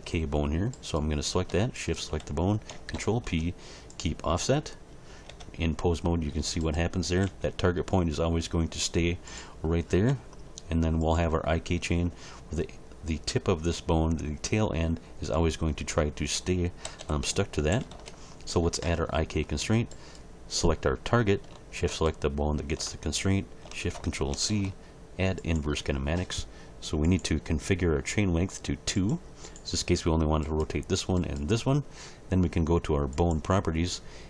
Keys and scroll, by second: 2.9 ctrl+p, 5.3 Tab, 7.2 g, 10.1 g, 16.8 a, 17.5 alt+r, 17.7 alt+g, 17.9 alt+s, 24.3 ctrl+shift+c.